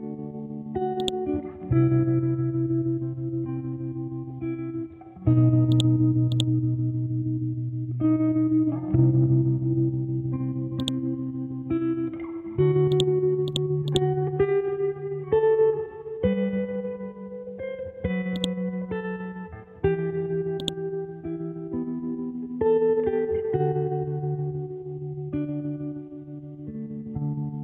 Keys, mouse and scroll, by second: 1.0-3.3 drag, 3.3 Tab, 5.7-10.8 drag, 12.9 right click, 13.5-18.3 drag, 20.6-27.6 ctrl+drag.